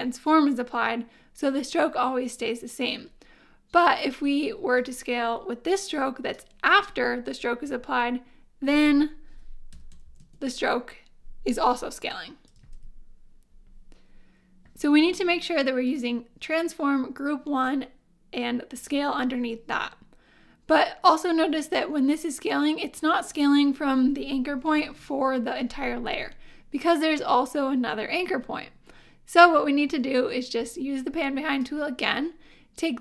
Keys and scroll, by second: 9.5-10.4 typing, 12.6 super+z, 24.8 super+z.